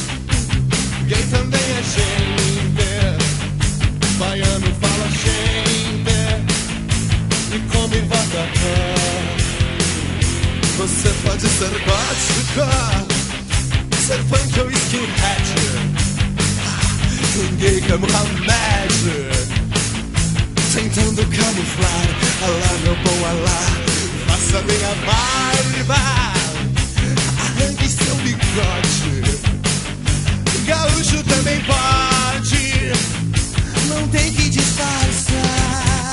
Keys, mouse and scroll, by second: 1.5 click, 2.7 click, 6.6-7.8 scroll down 6, 8.7 middle click, 11.5 click, 14.4 middle click, 15.3 alt+a, 18.7 alt+a, 19.8 click, 20.5 middle click, 21.4-21.7 scroll up 3, 21.9 Tab, 23.2 Tab, 24.9 click, 25.7 middle click, 29.6 click, 32.8 click, 33.6 middle click, 34.5-35.1 scroll up 2.